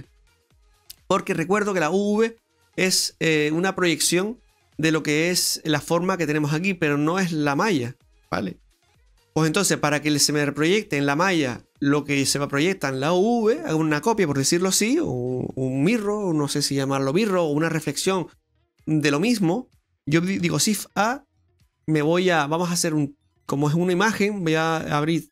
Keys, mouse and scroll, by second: 20.8 shift+a.